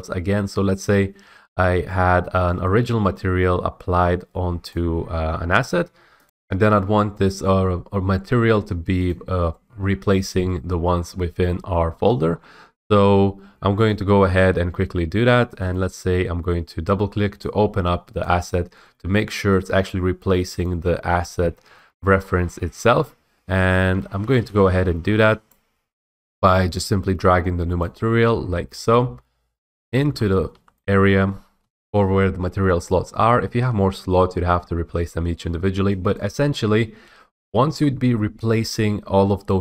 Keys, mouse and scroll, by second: 2.8 right click, 4.9 click, 6.2 F8, 7.3 right click, 8.3 right click, 9.2 click, 11.0-12.4 scroll, 12.4 middle click, 12.4 scroll, 12.5 scroll, 14.0 click, 15.7 click, 15.9 click, 16.7-17.8 drag, 17.9 drag, 20.8 click, 22.2-22.5 scroll, 25.6 click, 28.0 click, 29.0-30.6 typing, 29.2 click, 30.9 middle click, 31.7 F8, 36.3 click, 39.2 scroll.